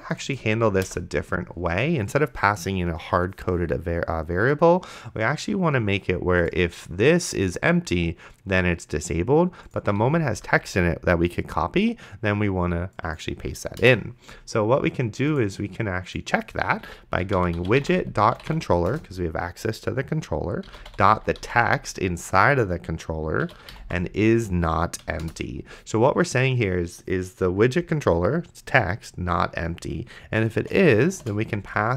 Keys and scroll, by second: 0.9 BackSpace, 10.1 d, 13.8 BackSpace, 17.0-19.3 typing, 20.4-21.9 typing, 23.2-24.3 typing, 25.0 Down, 25.3 Return, 31.4 shift+/, 31.6 space.